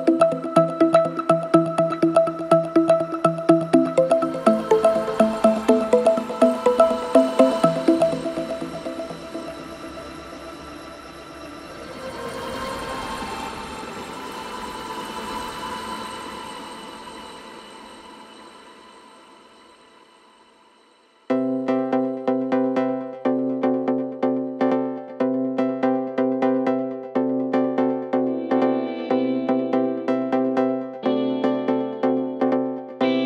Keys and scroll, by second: 3.0 ], 5.0 ], 7.0 ], 8.0 4, 9.5 3, 9.8 ], 10.8 4, 12.4 ctrl+z, 15.2 3, 15.4 ], 15.8 4, 19.0 ctrl+d, 19.0 Escape, 20.8 F9, 27.2 Delete, 32.9 3.